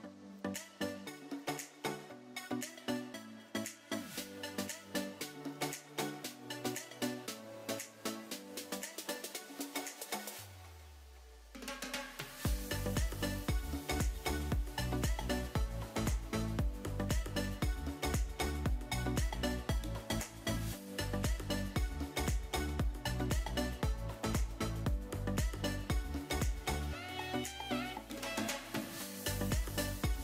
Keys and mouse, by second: 0.9 click, 1.2 s, 1.7 click, 2.3 g, 2.7 click, 3.3 e, 5.0 click, 6.0 ctrl+KP_Add, 7.7 ctrl+space, 10.0 f, 10.8 g, 12.8 click, 13.4 Tab, 14.4-14.9 middle drag, 15.5 ctrl+space, 16.1-16.5 middle drag, 16.7 drag, 17.6 KP_1, 18.4 click, 19.3 KP_3, 20.8 shift+g, 22.2 shift+d, 22.7 click, 23.1 r, 25.2 ctrl+click, 25.7 middle click, 26.3 Tab, 27.0 click, 27.7 KP_1, 29.1 g, 29.2 z.